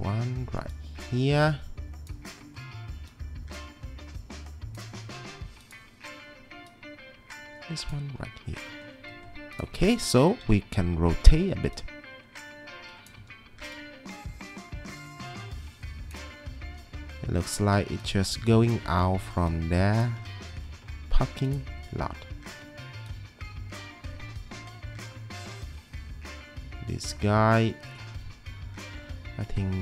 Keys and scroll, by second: 10.5-11.6 typing, 13.2 w, 16.6 e, 18.8 w, 22.5 e.